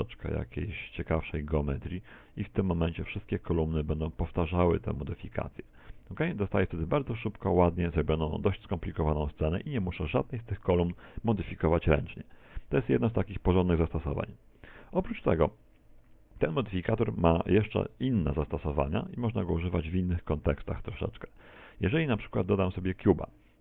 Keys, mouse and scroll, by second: 1.2 s, 2.5 click, 3.0 a, 3.3 b, 4.4 s, 5.2 Tab, 5.2 click, 5.5 middle click, 5.9 z, 6.3 middle click, 7.0-7.4 scroll down 3, 7.3 shift+middle click, 7.9 middle click, 19.1 x, 19.8 right click, 20.1 x, 20.5 shift+a.